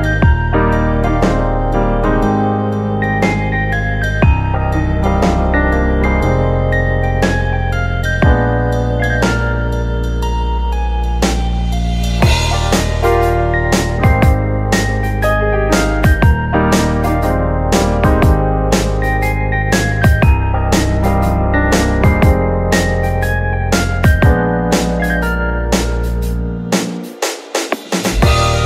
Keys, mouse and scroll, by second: 0.7-2.4 middle drag, 2.4 click, 3.4 shift+click, 3.9 shift+click, 4.5 shift+click, 4.9-6.2 middle drag, 6.2 click, 7.6 click, 8.0 shift+click, 8.9 KP_1, 9.9 KP_9, 11.2-11.6 scroll up 2, 12.1 s, 15.5 click, 16.6 s, 18.8 click, 20.4 click, 21.5 e, 22.7 click, 24.1 s, 27.2 ctrl+r.